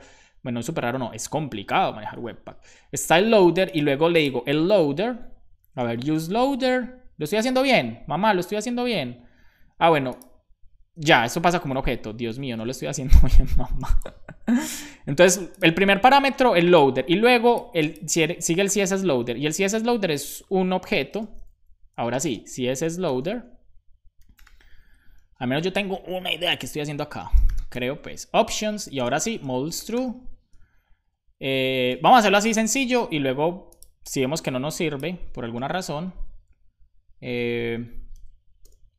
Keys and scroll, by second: 1.9 Return, 5.4-6.6 typing, 10.8 Return, 11.6 Right, 11.8 Right, 20.8 shift+;, 21.0 space, 22.2-24.9 typing, 25.5 shift+Up, 26.1 super+Right, 26.7 Return, 26.8-30.5 typing, 29.4 Return, 32.0 space, 32.3 e, 35.4 BackSpace, 37.3 Return, 38.0 ,, 38.5 BackSpace.